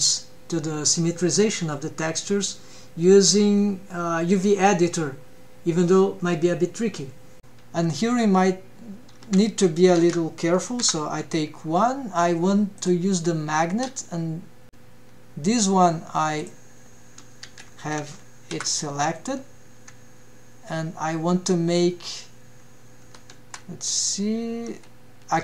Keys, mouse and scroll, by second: 0.0-0.5 scroll down 2, 0.5-0.9 scroll up 1, 1.0 shift+middle drag, 2.3-3.5 drag, 4.1 scroll up 1, 4.3 shift+middle drag, 4.9-5.3 scroll down 1, 5.4 alt+a, 6.4 l, 8.3 alt+a, 9.2 alt+a, 10.0 l, 12.0 click, 15.6 click, 16.7 alt+a, 17.7 l, 22.3 g, 25.3 g.